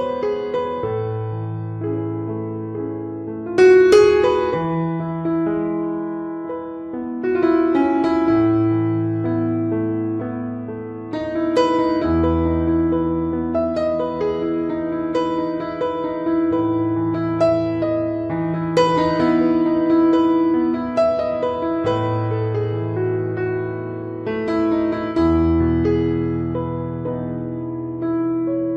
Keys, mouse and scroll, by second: 0.8 click, 1.3 click, 1.7 middle click, 2.0 click, 2.1 click, 2.7 click, 2.9 click, 3.5 ctrl+right click, 3.9 shift+right click, 4.2 right click, 4.6 click, 5.4 middle click, 5.8 middle click, 6.1 click, 7.2 right click, 7.7 click, 8.7 right click, 8.9 click, 10.9 middle click, 10.9 ctrl+right click, 11.2 right click, 11.5 click, 13.0 middle click, 13.4 middle click, 13.7 click, 14.8 middle click, 15.4 click, 17.0 click, 17.5 right click, 17.8 ctrl+right click, 18.1 click, 18.9 middle click, 19.6 right click, 20.0 click, 21.3 middle click, 21.8 ctrl+right click, 22.0 right click, 22.4 f, 22.7 click, 23.9 click, 25.3 click, 25.3 middle click, 25.8 right click, 26.1 click, 27.6 middle click, 28.2 middle click.